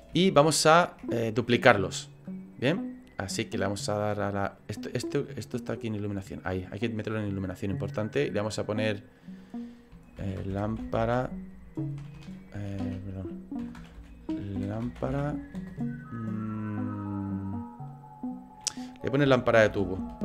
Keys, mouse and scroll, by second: 0.2 shift+middle click, 5.2 click, 8.2 click, 12.1 BackSpace, 12.7 BackSpace.